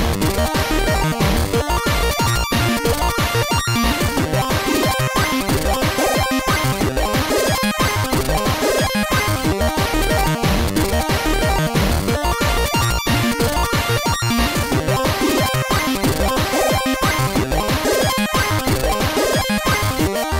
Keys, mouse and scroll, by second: 6.6 click, 8.1 click, 8.6 Up, 9.4 Return.